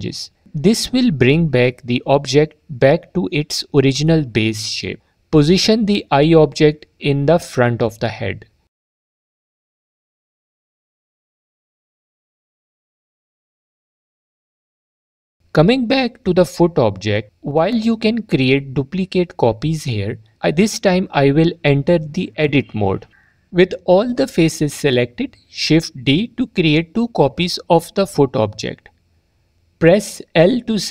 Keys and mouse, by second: 2.6 click, 3.4 s, 5.1 click, 7.4 s, 7.7 click, 9.6 click, 11.8 click, 13.6 s, 16.7 drag, 22.8 Tab, 25.9 shift+d, 26.5 click.